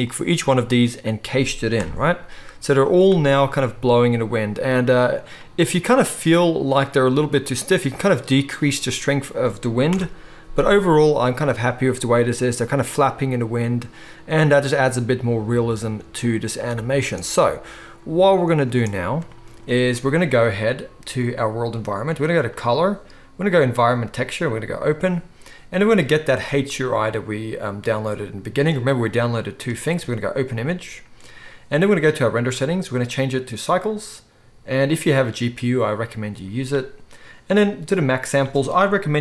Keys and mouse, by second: 1.9 KP_0, 10.0 shift+Left, 18.8 space, 21.3-22.6 middle drag, 22.6-32.4 drag, 32.4-32.9 middle drag, 32.9-39.2 drag.